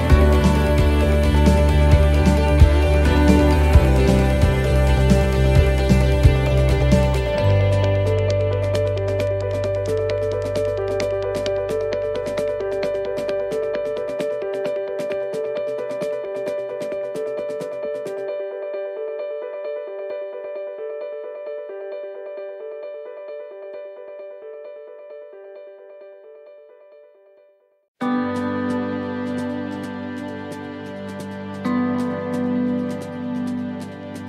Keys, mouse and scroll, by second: 0.6 middle click, 1.1-1.7 scroll up 3, 1.8 shift+middle click, 2.3 scroll up 1, 3.3 right click, 3.9 shift+right click, 4.8 shift+right click, 5.2 shift+right click, 5.8 click, 14.8 click, 15.1-16.4 ctrl+z, 17.4 ctrl+z, 17.5 scroll up 1, 17.6 middle click, 18.0 scroll down 2, 18.6 middle click, 19.8 middle click, 20.8 right click, 22.3 shift+d, 24.0 s, 27.1 click, 32.9 middle click, 34.1 middle click.